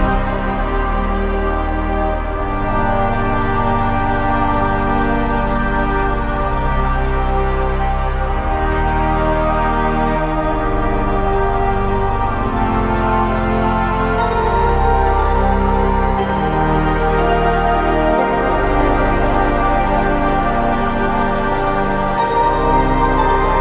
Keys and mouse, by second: 2.2 alt+click, 3.9 alt+click, 4.9 alt+click, 6.6 alt+click, 8.3 alt+click, 9.4 alt+click, 11.6 alt+click, 14.1 alt+click, 15.5 alt+click, 23.3 ctrl+click.